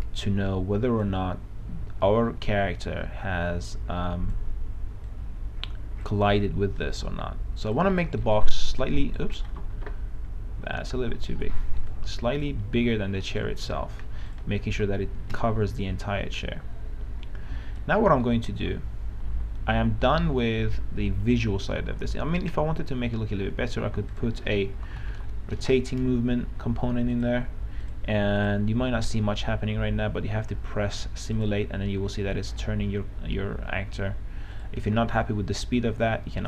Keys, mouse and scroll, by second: 1.5 space, 2.1 space, 3.1-9.9 drag, 9.9 ctrl+z, 11.4 ctrl+z, 12.4 click, 13.0 s, 13.4 a, 15.6 space, 18.6 right click, 18.8-22.1 typing, 24.4 click, 24.9-25.6 typing, 27.3 click.